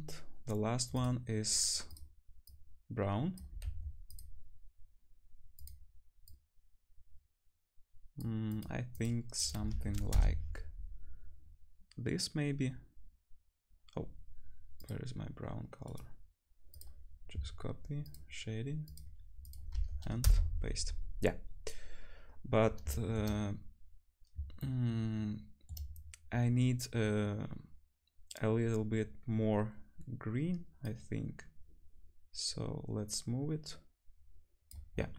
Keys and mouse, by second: 0.4 middle click, 0.4 right click, 1.9 middle click, 1.9 right click, 2.5-4.2 middle drag, 2.5 right click, 3.6 ctrl+c, 3.8 click, 3.8 right click, 4.2 ctrl+c, 4.2-5.4 drag, 4.3-5.4 middle drag, 4.3-5.4 right drag, 5.7-8.6 drag, 8.9 click, 14.8-18.1 drag, 14.8 middle click, 14.8 right click, 18.1 click, 18.2-21.5 drag, 18.2 middle click, 18.2 right click, 22.6 shift+click, 24.8 shift+click, 30.8 click.